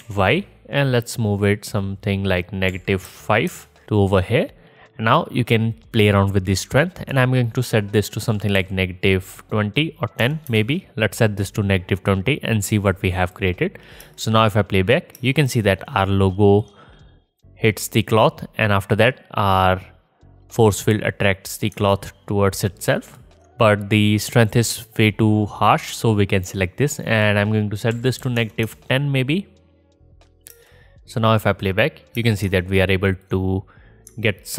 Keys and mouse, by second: 7.2-11.5 middle drag, 11.5-12.7 drag, 14.1 space, 15.2 space, 19.0-21.7 drag, 25.9-27.2 drag, 30.5 space, 32.2 space.